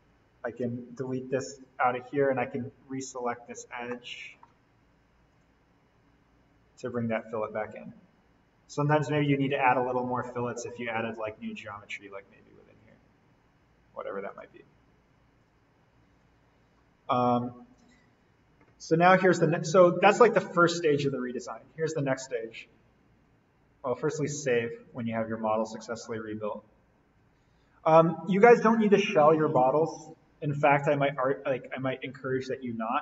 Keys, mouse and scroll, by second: 0.5 BackSpace, 0.9 Delete, 3.9-5.3 middle drag, 5.3 click, 6.1-7.1 scroll up 1, 7.1 click, 9.8 click, 16.7-17.7 scroll up 1, 17.7 click, 24.1 click, 27.8 click, 29.5 Delete, 31.1 click.